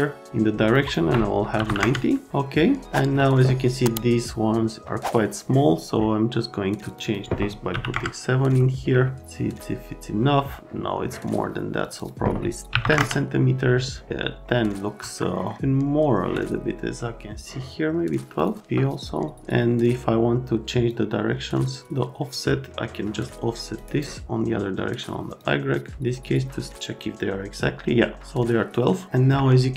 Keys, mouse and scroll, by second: 0.7 click, 0.8 click, 1.6 KP_9, 1.6 KP_0, 1.8 KP_Enter, 7.7 KP_7, 7.9 KP_Enter, 12.7 KP_1, 12.8 KP_0, 12.9 Return, 15.0 F3, 28.3 middle click.